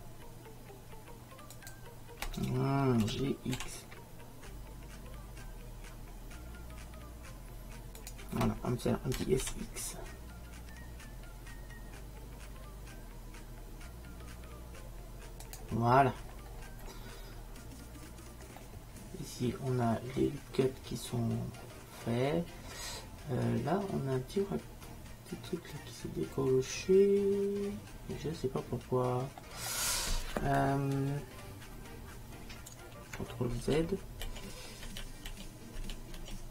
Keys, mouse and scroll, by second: 3.1 g, 9.2 s, 16.3-18.7 middle drag, 19.6 middle click, 33.7 ctrl+z.